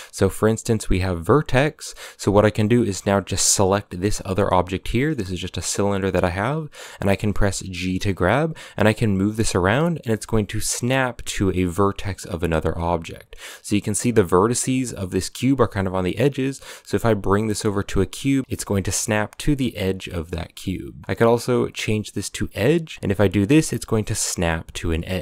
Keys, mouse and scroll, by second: 3.5 right click, 3.7-4.5 middle drag, 4.5 scroll up 2, 4.7-7.6 shift+middle drag, 7.6 g, 18.4 g, 19.7 g, 22.9 g.